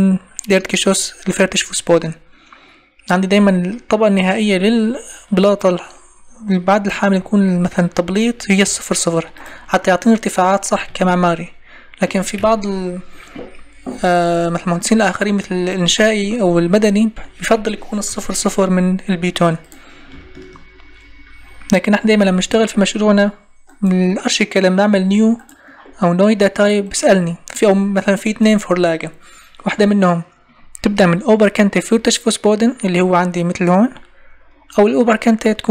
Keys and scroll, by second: 12.4 Escape, 17.5 Escape, 22.2 Escape.